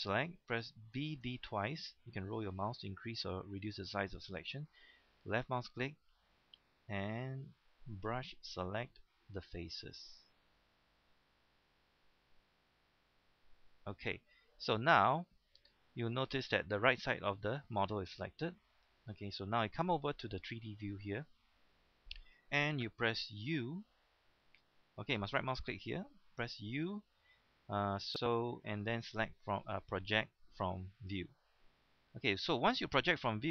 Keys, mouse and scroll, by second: 0.9 b, 1.2 b, 2.1 scroll up 1, 2.3-3.2 scroll down 1, 3.2-3.7 scroll up 1, 3.7-5.4 scroll down 1, 5.4-14.8 drag, 23.7 u, 24.4 right click, 26.5 u, 31.0-32.0 drag.